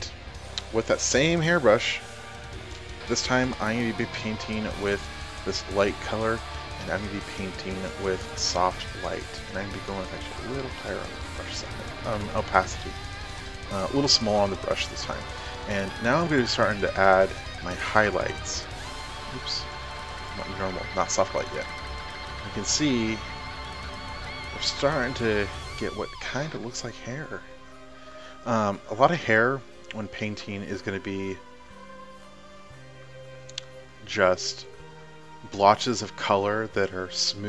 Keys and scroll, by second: 13.9 [.